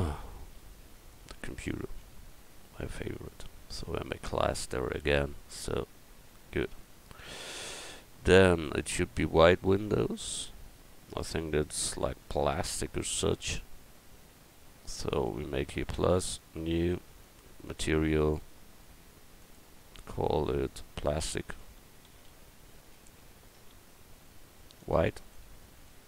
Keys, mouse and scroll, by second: 0.1 Tab, 0.5 a, 0.9-2.0 drag, 2.0 l, 4.4-5.6 drag, 5.6 Tab, 10.8 middle click, 11.5 middle click, 13.0 middle click, 13.3 middle click, 15.1-19.2 drag, 19.9-26.0 drag.